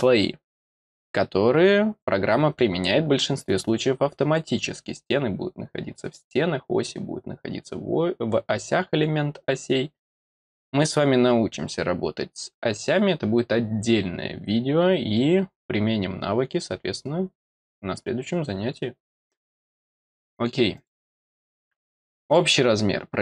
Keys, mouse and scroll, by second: 20.7 click, 22.2 click.